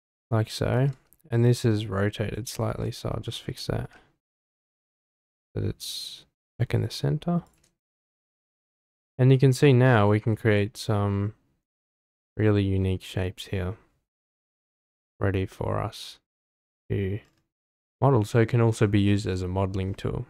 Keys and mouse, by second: 0.7 Tab, 1.5 middle click, 2.6 `, 3.8 r, 7.4 shift+click, 7.8 Tab, 8.6-12.4 middle drag, 15.5-16.8 middle drag, 17.6-18.1 middle drag.